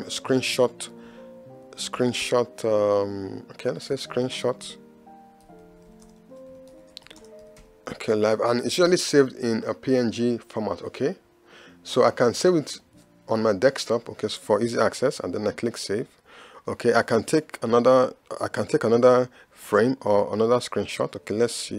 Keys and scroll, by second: 0.0 Escape, 1.1 Left, 2.0 Right, 6.1 space, 7.2 space.